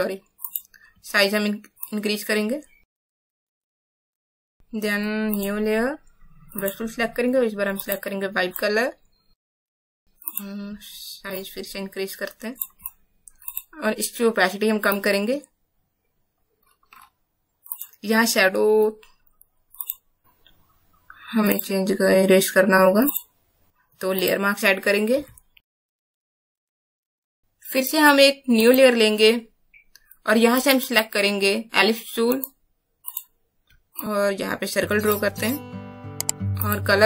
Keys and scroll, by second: 25.2 b.